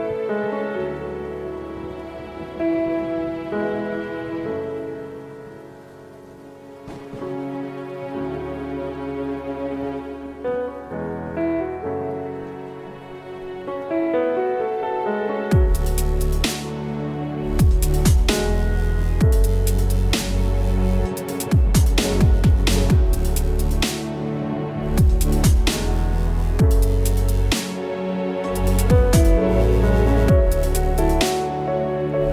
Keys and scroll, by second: 8.0 ctrl+KP_0, 15.9 ctrl+z, 16.9 s, 17.4 space, 18.0 alt+space, 19.1 alt+space, 23.4 space.